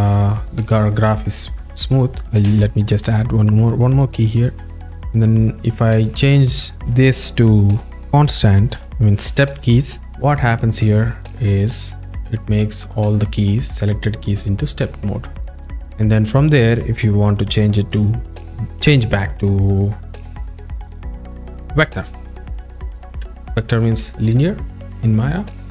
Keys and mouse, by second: 2.6 s, 3.7-5.1 drag, 5.3 click, 7.9 a, 7.9 t, 11.5-16.8 drag, 20.2 v.